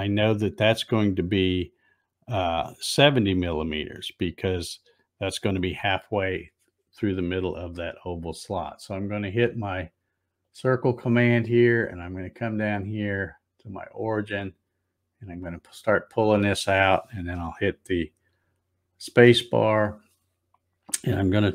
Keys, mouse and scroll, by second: 10.4 click, 14.1-19.2 drag, 19.0 space.